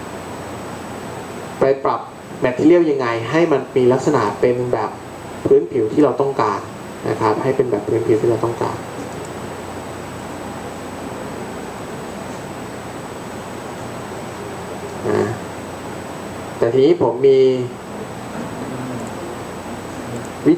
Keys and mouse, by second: 4.2-6.0 drag, 19.9 click.